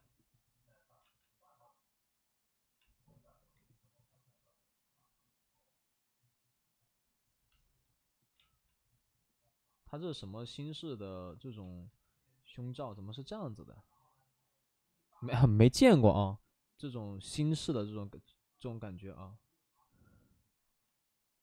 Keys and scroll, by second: 1.0 ctrl+z, 5.3 ctrl+z, 8.3 ctrl+z, 11.6 ctrl+z, 13.7 ctrl+z, 17.3 ctrl+alt+z, 17.6 space, 18.7 space.